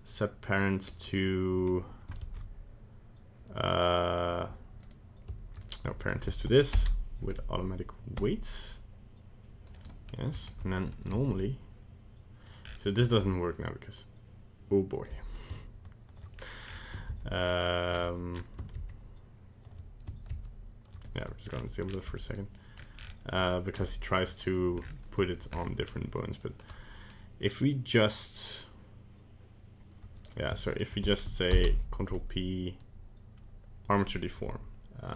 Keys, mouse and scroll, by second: 2.2 ctrl+a, 4.8 right click, 5.6 right click, 6.0 shift+right click, 6.7 ctrl+p, 9.8 middle click, 10.5 ctrl+Tab, 10.7 right click, 11.1 g, 12.6-12.9 scroll down 6, 12.9 g, 16.3 scroll up 1, 16.6 scroll down 1, 16.7 scroll down 3, 17.3 ctrl+z, 18.1-18.4 scroll up 4, 19.0 ctrl+z, 20.5 ctrl+z, 21.2 right click, 21.4-22.1 scroll down 7, 22.1 middle click, 22.7 scroll up 1, 22.9 scroll down 1, 23.1 scroll down 1, 24.8 scroll up 5, 25.5-25.8 scroll up 6, 25.8 scroll down 1, 26.3 right click, 26.7 middle click, 27.1 middle click, 30.2 right click, 30.7 shift+right click, 31.5 ctrl+p.